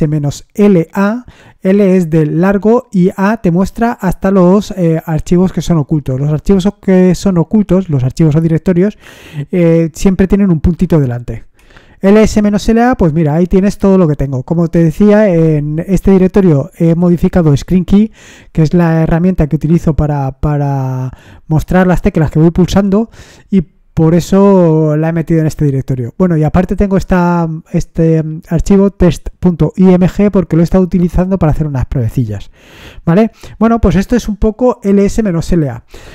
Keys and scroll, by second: 0.0-0.1 typing, 11.6 Return.